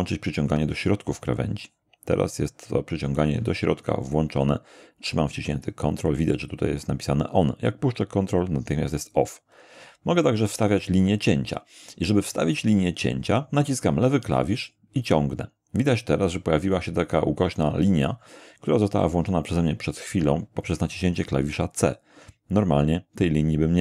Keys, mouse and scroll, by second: 14.3-22.1 drag.